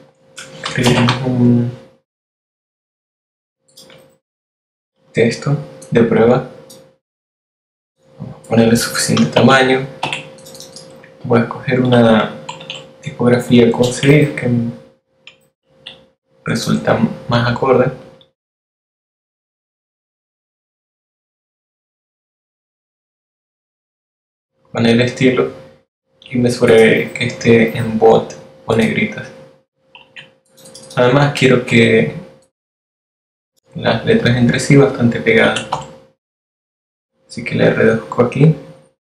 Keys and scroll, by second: 0.3-1.8 typing, 2.6 shift+Up, 11.8 shift+t, 14.3 super+t, 20.3 t, 37.4 8.